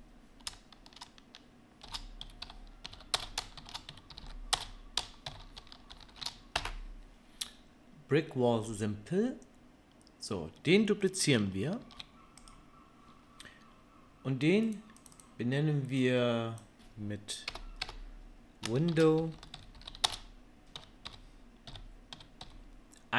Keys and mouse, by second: 4.2 l, 11.8 shift+d, 14.7 middle click, 15.0-23.1 drag, 17.8 BackSpace.